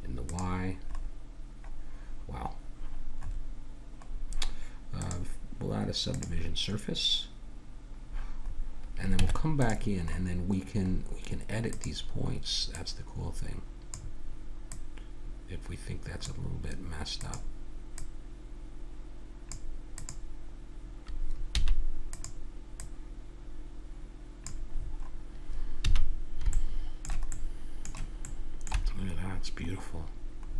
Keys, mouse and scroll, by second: 1.2-4.1 middle drag, 5.0-8.4 drag, 8.5-9.7 middle drag, 9.1 Tab, 10.0 middle click, 11.7-14.6 drag, 14.7-16.6 drag, 17.2-19.7 drag, 20.0-21.5 drag, 21.5 a, 21.8 click, 22.1-24.6 drag, 24.7-25.8 middle drag, 25.8 a.